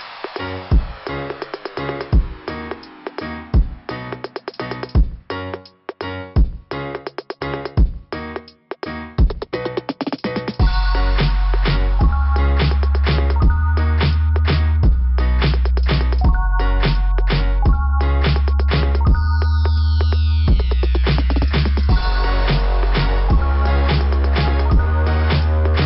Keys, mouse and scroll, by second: 0.1 click, 0.2 3, 4.5 click, 7.4 click, 10.4 click, 12.7 click, 12.8 click, 16.6-18.7 typing, 21.3 Return, 21.3 0, 23.8 scroll up 2.